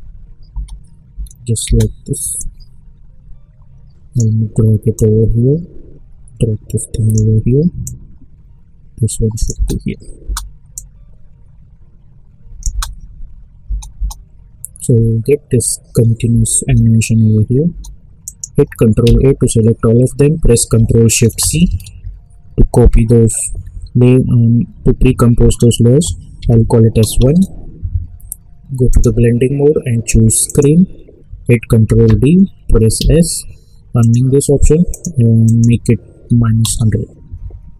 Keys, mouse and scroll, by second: 0.5 space, 2.3-9.5 drag, 9.5 space, 10.7-12.6 drag, 12.6 space, 16.2 space, 18.2 click, 19.0 ctrl+a, 21.6 ctrl+shift+c, 26.3 1, 27.2 Return, 28.9 click, 31.8 ctrl+d, 33.0 s, 34.0 click, 36.3 -, 36.6 Return.